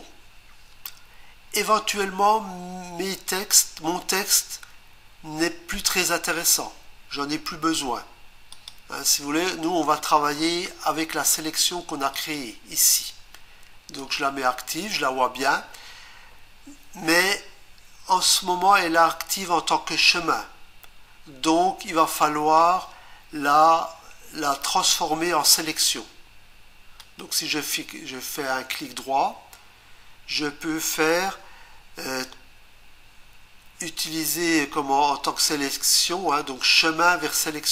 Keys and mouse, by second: 8.5 click, 12.1 click, 14.0 click, 27.0 right click.